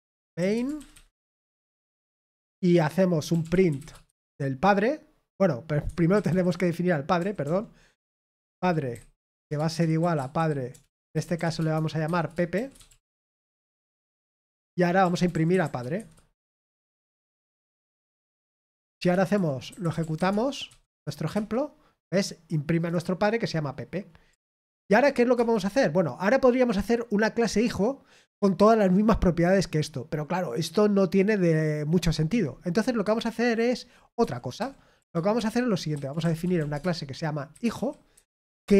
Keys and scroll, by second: 0.7-1.5 typing, 1.7 Return, 3.7 typing, 5.8-7.9 typing, 9.4-14.1 typing, 15.6-21.3 typing, 24.4 ctrl+p, 24.7 ctrl+p, 25.3 Return, 33.7-34.5 j, 34.5 o, 35.3 Return, 35.6-38.7 typing.